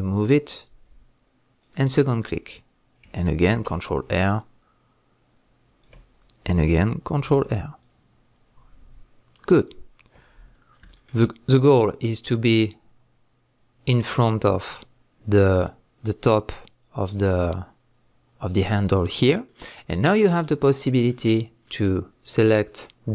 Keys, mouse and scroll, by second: 1.7 click, 3.5 ctrl+r, 5.9 click, 7.2 ctrl+r, 9.6 click, 10.3 scroll up 1, 10.5 scroll down 1, 10.9-11.5 shift+middle drag, 11.5-13.2 scroll up 1, 13.3-15.7 middle drag, 15.4-15.7 scroll down 1, 15.7-17.0 scroll up 1, 17.0 scroll down 1, 19.4 middle click, 20.1 scroll up 1, 20.4 middle click, 21.3-21.6 scroll up 1.